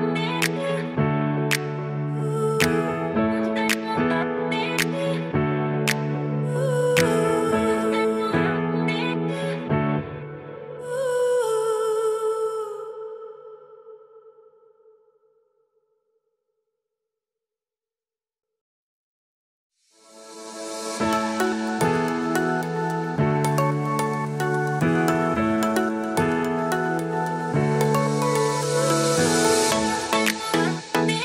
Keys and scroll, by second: 3.2 super+s, 6.0 super+s, 27.4 super+z.